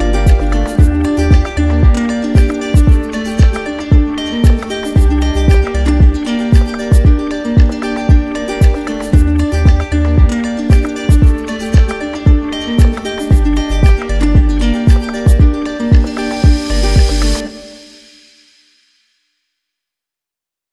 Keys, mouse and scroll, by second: 1.4 alt+click, 2.2 right click, 4.4 z, 5.2 click, 6.2 right click, 7.6 click, 8.8 middle click, 8.8 right click, 10.3 click, 12.2 click, 12.9 right click, 13.8 z, 15.3 click, 16.1-17.1 right drag, 17.3 click, 18.0 right click, 19.4 alt+click, 20.3 ctrl+z.